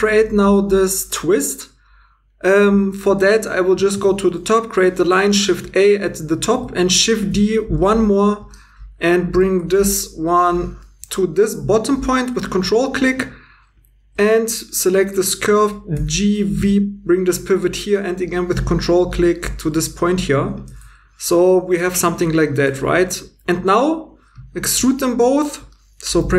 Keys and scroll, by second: 3.9 shift+a, 7.2 shift+d, 9.6 g, 15.9-16.6 typing, 20.6 2, 24.9 e, 26.2 f.